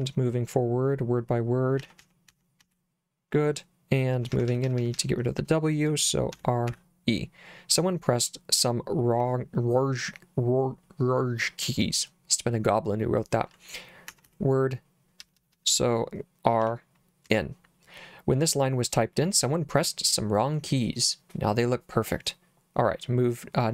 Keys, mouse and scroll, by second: 1.8 w, 2.0 w, 2.3 w, 2.6 w, 3.9-6.7 typing, 14.1-15.5 typing, 16.6 r, 17.3 n.